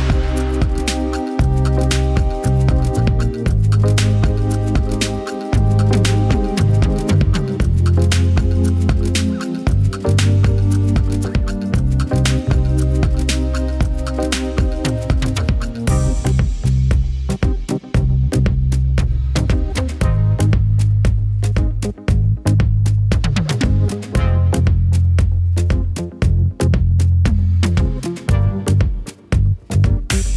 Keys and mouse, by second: 0.1 middle click, 0.3 click, 0.7 click, 0.8 o, 0.9 BackSpace, 1.2 click, 2.0 click, 2.4 ctrl+Tab, 2.4 click, 2.8 BackSpace, 3.8 z, 4.0 click, 4.4 click, 4.6 ctrl+p, 5.0 x, 5.2 ctrl+z, 5.4 Tab, 5.6 click, 6.3 click, 6.7 click, 6.9 ctrl+Tab, 7.1 click, 7.9 alt+middle click, 7.9 z, 8.1 r, 8.3 ctrl+Tab, 8.5 click, 8.8 ctrl+Tab, 9.1 click, 9.8 click, 10.4 z, 10.8 click, 10.8 r, 11.2 click, 11.8 ctrl+Tab, 11.8 r, 12.0 click, 12.4-13.6 drag, 12.4 BackSpace, 12.6 ctrl+Tab, 14.0 click, 14.4 middle click, 14.6 click, 14.8 KP_1, 15.4 r, 15.8 middle click, 16.0 alt+a, 16.2 middle click, 16.6 click, 16.8 ctrl+Tab, 16.8-19.8 typing, 16.9 click, 17.2 Up, 17.4 Down, 17.8 click, 18.2 click, 18.8 click, 19.2 click, 19.4 ctrl+Tab, 19.6 click, 19.8 ctrl+Tab, 20.2 ctrl+Tab, 20.4 ctrl+Tab, 21.0 Up, 21.2 alt+a, 21.4 Down, 21.4 Up, 21.4 Tab, 22.0 ctrl+z, 22.2 ctrl+Tab, 22.6 Down, 23.0 ctrl+Tab, 23.4-24.4 typing, 23.8 ctrl+Tab, 24.0 alt+a, 24.6 alt+a, 24.6 ctrl+Tab, 24.8 click, 25.2 ctrl+Tab, 25.4 click, 25.6 ctrl+Tab, 25.6 r, 26.0 ctrl+Tab, 26.2 click, 26.8 click, 27.2 ctrl+Tab, 27.4 middle click.